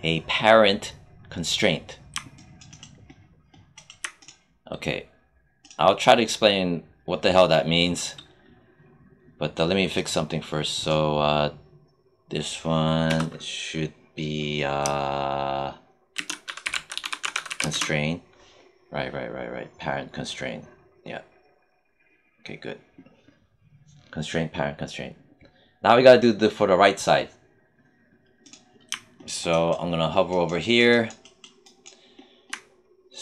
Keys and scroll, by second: 13.0 Return, 15.8-18.1 typing.